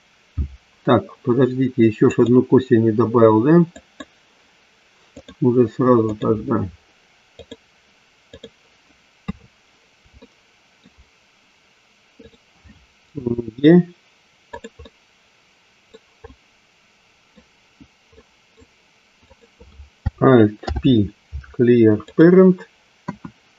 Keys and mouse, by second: 2.1 click, 3.9 click, 5.1-6.3 drag, 7.4 click, 9.1 KP_3, 10.3 shift+middle click, 12.1 click, 13.1 e, 15.8 middle click, 16.1-17.3 middle drag, 18.1 middle click, 19.3-20.5 drag, 20.5 alt+p, 22.9 KP_1.